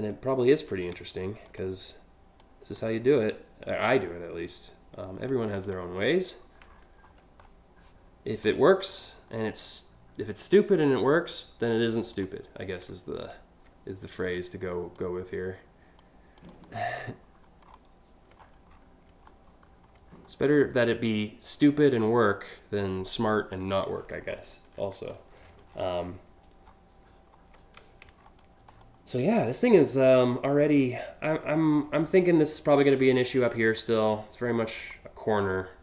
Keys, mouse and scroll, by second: 1.1 click, 2.0-2.4 drag, 3.3-4.9 drag, 5.2 click, 5.9 scroll down 1, 6.4-7.1 scroll up 6, 8.1 scroll up 2, 8.6-8.9 alt+scroll up 3, 11.8 click, 12.9 click, 14.6-15.6 drag, 16.0 click, 16.7 alt+scroll down 1, 17.3 alt+scroll down 1, 18.0-18.5 scroll up 5, 18.9 alt+scroll up 1, 19.2 alt+scroll down 1, 19.5 alt+scroll down 1, 19.7 scroll down 1, 20.2 scroll down 1, 21.5 scroll down 1, 23.9 scroll down 1, 24.8-25.5 scroll up 3, 26.3 alt+scroll up 1, 27.9 alt+scroll down 1, 28.4 alt+scroll down 1, 29.4-29.8 alt+scroll up 2, 31.1-31.6 alt+scroll up 3, 32.7 alt+scroll up 2, 33.3 click, 34.4 click, 35.5 click.